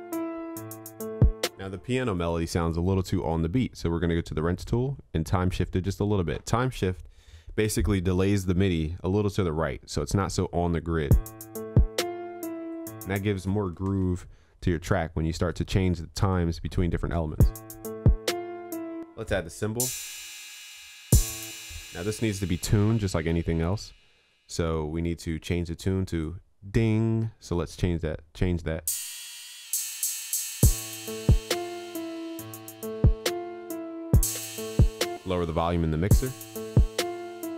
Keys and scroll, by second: 14.0 ctrl+s.